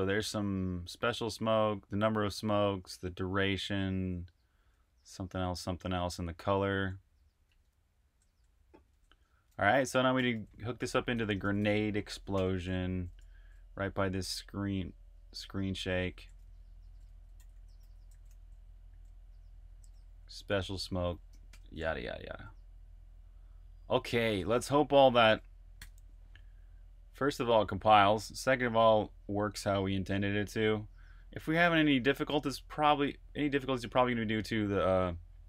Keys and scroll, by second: 4.7 super+c, 7.3 super+Tab, 8.8 super+`, 9.8-13.7 typing, 15.6-19.5 typing, 16.9 Escape, 21.4-22.7 typing, 24.3 typing, 25.7 super+b, 25.7-26.8 typing.